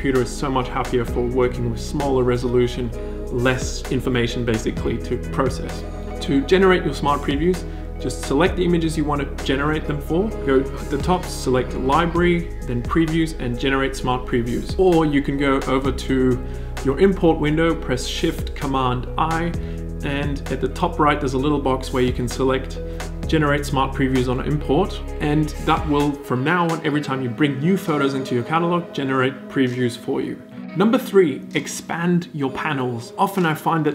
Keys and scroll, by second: 18.8 shift+super+i.